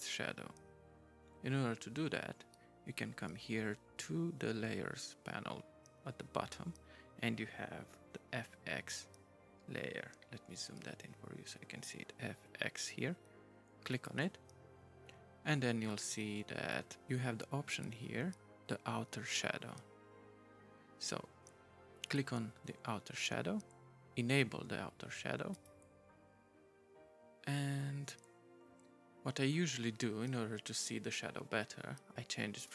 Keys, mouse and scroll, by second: 13.9 right click, 15.9 right click, 22.0 right click, 25.5 right click.